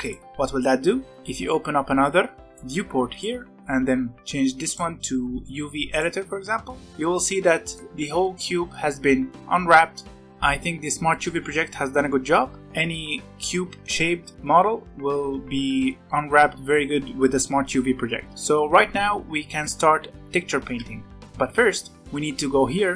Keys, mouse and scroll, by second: 1.1-6.7 drag, 6.7 middle click, 7.1 scroll up 2, 7.4-8.9 middle drag, 8.9-9.6 scroll up 1, 9.6-10.5 scroll down 6, 9.9 middle click, 10.5 scroll up 1, 11.0-12.6 middle drag, 12.6 u, 18.3-20.8 middle drag, 20.8 Tab, 21.9-22.9 drag.